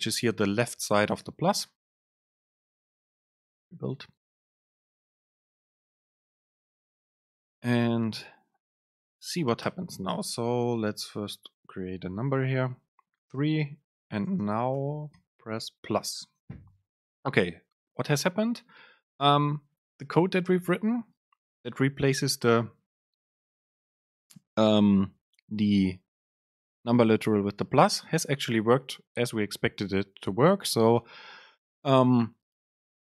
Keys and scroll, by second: 9.7 Return, 10.2 super+space, 14.5 super+space.